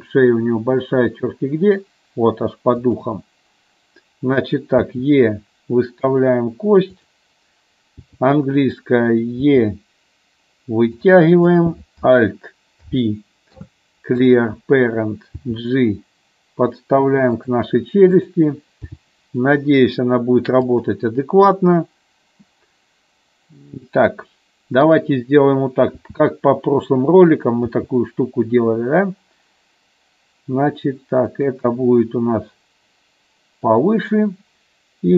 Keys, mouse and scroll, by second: 2.9 click, 4.9 e, 7.1 click, 9.6 e, 11.7 click, 12.9 alt+p, 15.5 g, 17.5 click, 19.1 g, 20.8 click, 25.0 click, 26.1 s, 27.4 click, 27.7 g, 31.5 click.